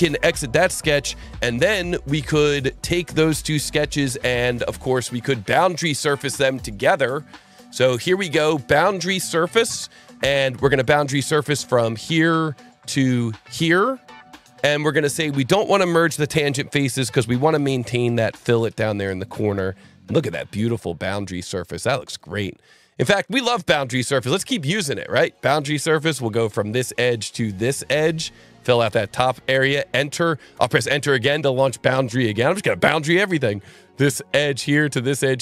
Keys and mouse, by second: 0.2 click, 4.2 click, 5.0 click, 8.9 click, 11.4 click, 13.4 click, 16.5 click, 22.1 click, 25.3 click, 26.4 click, 27.9 click, 29.5 Return, 30.5 Return, 33.7 click, 34.9 click.